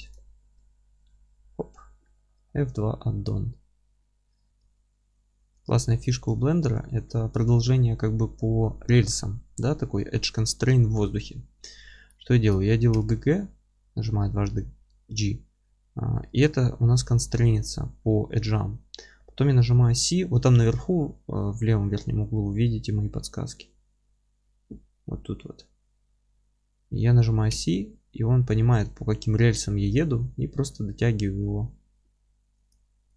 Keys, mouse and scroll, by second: 0.1 click, 0.4-4.5 middle drag, 0.9 f, 2.2 scroll down 1, 2.7 alt+q, 4.5 g, 6.4-33.1 alt+middle drag, 6.8 scroll down 1, 11.5-11.9 scroll up 1, 11.9 scroll down 1, 13.0 g.